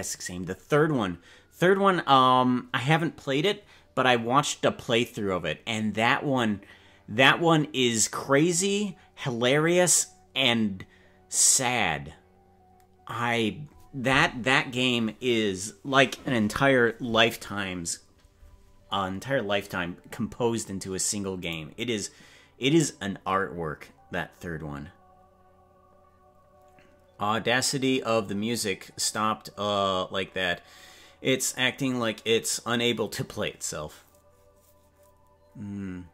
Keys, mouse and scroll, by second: 21.7 right click.